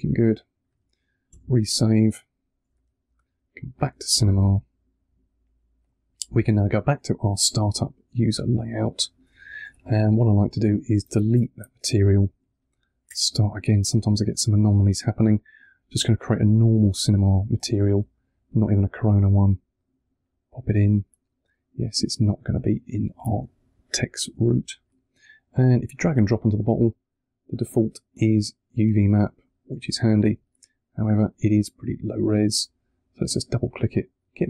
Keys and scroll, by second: 1.2 super+s, 2.5 super+Tab, 8.3 3, 11.2 BackSpace, 12.9 BackSpace, 30.2 3.